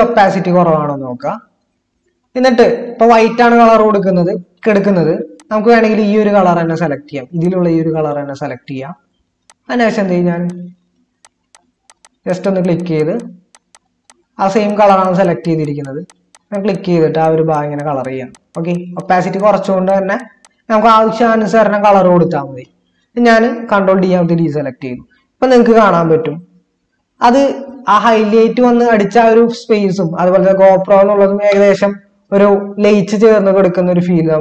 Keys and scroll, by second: 23.9 ctrl+d, 25.6 ctrl+-, 27.2 ctrl++, 32.2 ctrl+-.